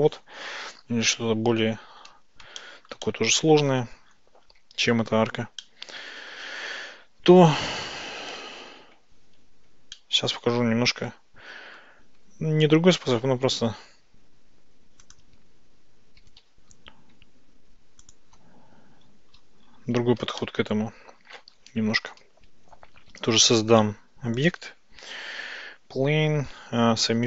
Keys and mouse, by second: 2.6-3.0 shift+middle drag, 3.1-3.9 middle drag, 5.6-6.4 middle drag, 10.0-11.8 shift+middle drag, 12.8 g, 13.0 y, 16.2 g, 16.4 y, 18.1 ctrl+click, 20.5-21.4 shift+middle drag, 23.0 shift+a, 25.6 Tab.